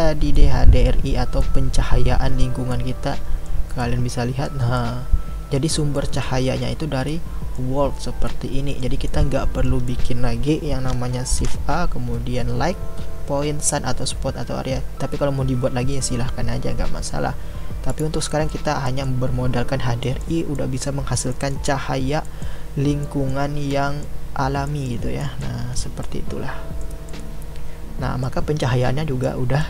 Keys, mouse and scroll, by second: 0.3-3.4 middle drag, 3.9-29.6 middle drag.